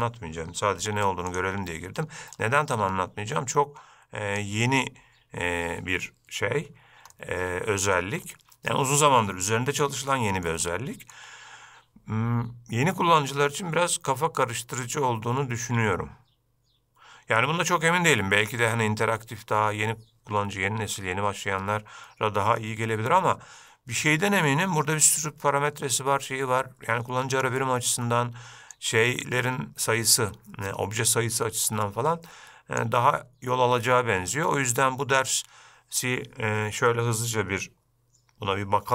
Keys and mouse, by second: 0.9 x, 2.5-4.6 drag, 7.3-8.1 middle drag, 8.4-8.8 shift+middle drag, 10.2-10.6 middle drag, 10.8-11.3 shift+middle drag, 18.3-18.7 middle drag, 28.8-32.9 drag.